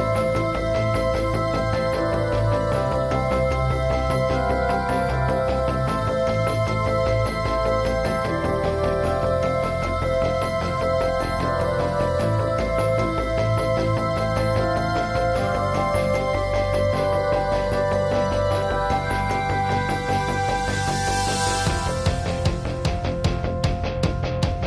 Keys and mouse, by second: 0.2-0.6 drag, 1.9 middle click, 2.6 click, 3.7 drag, 3.8-4.2 middle drag, 6.3 middle click, 6.9 middle drag, 8.5 click, 9.5 drag, 9.6-10.1 middle drag, 10.1-10.4 drag, 10.3 ctrl+s, 10.4-10.8 middle drag, 11.2 middle drag, 11.6-12.5 middle drag, 12.3 ctrl+s, 13.2 middle drag, 13.4 KP_1, 13.9 middle click, 14.4 click, 14.4 middle click, 14.6-15.1 middle drag, 15.4 click, 15.8-16.2 middle drag, 16.2 click, 17.7 [, 17.8 [, 18.2-19.0 drag, 18.8-19.6 ], 19.2 click, 21.1-22.4 middle drag, 21.9 KP_1, 22.4-23.6 drag, 23.6 middle click, 23.8 click.